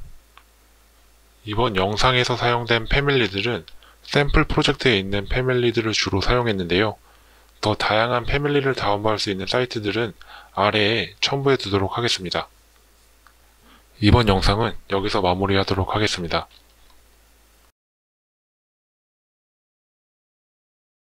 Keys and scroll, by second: 0.2 Escape.